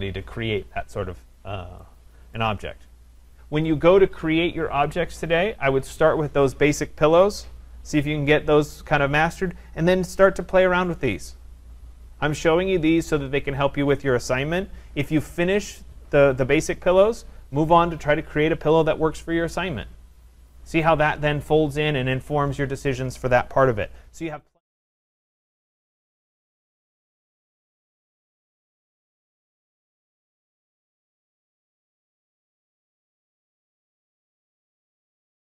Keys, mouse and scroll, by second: 2.4 right click.